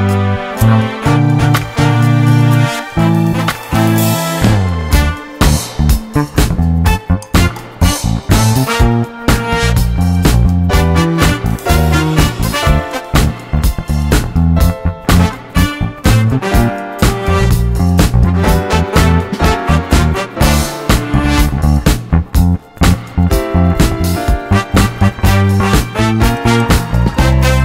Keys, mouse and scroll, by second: 0.9-2.5 scroll up 2, 2.5-5.4 drag, 5.9-7.3 middle drag, 7.3 shift+space, 9.3 shift+space, 10.1 shift+Left, 10.6 shift+space, 11.8 shift+space, 12.8-15.1 drag, 18.5-20.3 drag, 22.0-25.6 drag, 27.2 click.